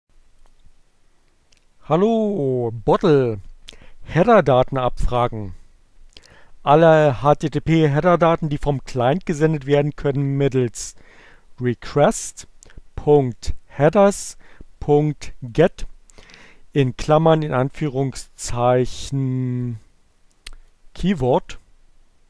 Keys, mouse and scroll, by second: 0.4 click, 11.0-15.5 drag, 19.3-20.8 drag.